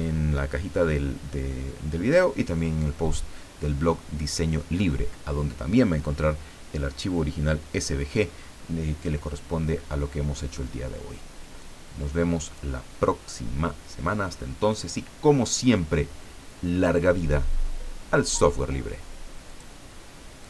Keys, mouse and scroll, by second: 19.5 click, 20.4 click.